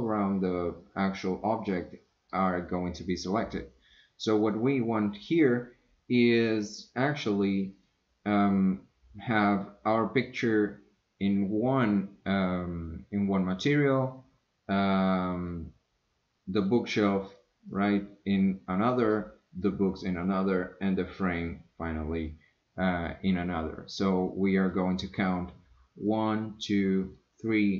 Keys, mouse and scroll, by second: 7.7 click, 14.8-15.5 drag, 19.7-20.0 drag, 24.9 click, 26.1 click, 27.1 click.